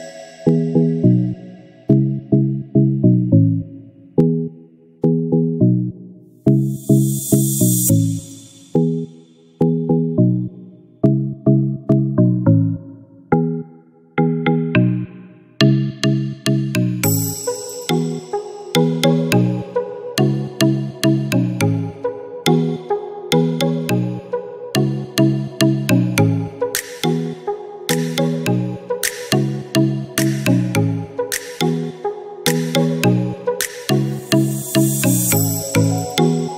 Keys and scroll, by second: 1.0 Return, 4.1-4.9 typing, 5.1 Return, 11.7 ctrl+s, 17.8 space, 34.5 space, 34.6 8, 35.5 Return.